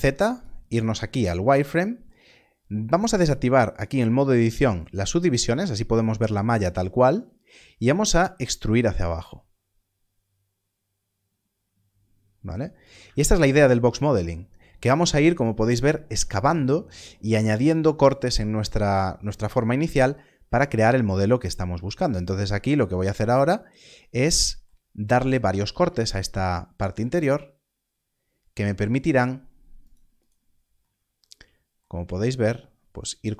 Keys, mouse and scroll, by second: 0.3 click, 4.6 click, 8.1 e, 12.8 e, 12.8 click, 14.6 scroll up 1, 19.6-21.6 scroll, 22.9 click, 24.8-25.3 scroll down 1, 26.1 ctrl+r, 30.1 right click, 32.1 z.